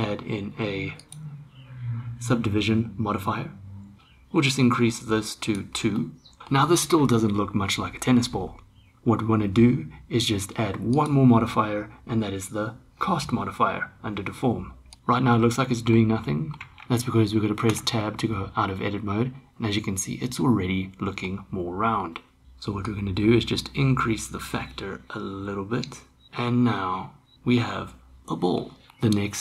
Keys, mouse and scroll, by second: 1.0-4.0 drag, 6.0 middle click, 10.9-14.9 drag, 14.9 Tab, 15.4-15.9 middle drag, 16.3 middle click, 16.5 Tab, 16.7 Tab, 17.7 Tab, 18.2-21.2 middle drag, 23.0-26.2 drag, 26.2-28.5 middle drag.